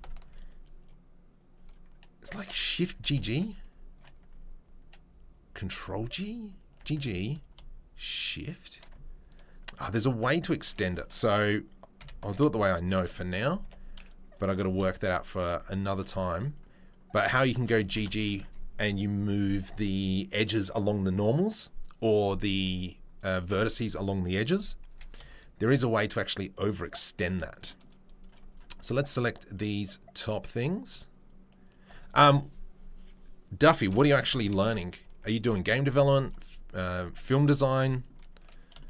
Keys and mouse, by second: 0.0-14.2 alt+middle drag, 3.0 shift+g, 5.6 ctrl+g, 6.8 g, 12.2 e, 13.6 3, 14.3-15.9 middle drag, 14.7 z, 15.9 shift+right click, 16.5 shift+middle click, 17.1 right click, 17.2 middle click, 17.9 shift+middle click, 18.1 right click, 18.2-28.2 middle drag, 24.9 e, 27.9 ⋮, 28.2 right click, 28.4 shift+middle click, 28.8 shift+right click, 28.8 shift+middle click, 29.5 shift+right click, 29.5 shift+middle click, 29.8 shift+right click, 30.5 shift+middle click, 30.7 shift+right click, 31.7-38.8 shift+middle drag, 33.9 ctrl+i, 35.3 Delete.